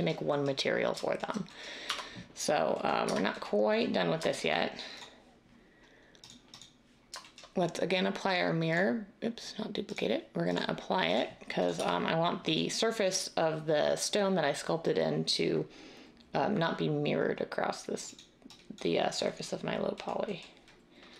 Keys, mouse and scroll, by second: 1.8 Tab, 3.0 Tab, 11.7 Tab.